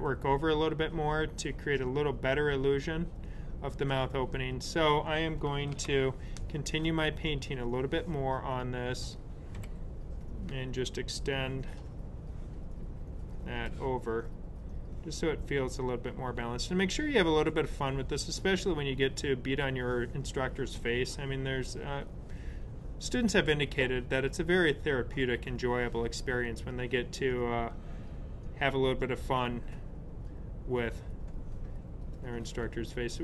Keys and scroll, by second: 5.6 super+z, 9.5 b.